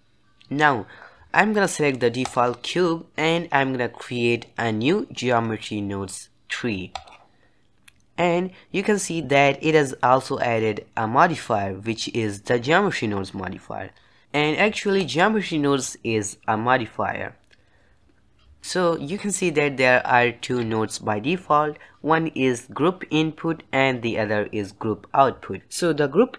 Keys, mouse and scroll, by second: 0.0 drag, 0.2 t, 2.7 click, 7.4-26.3 drag.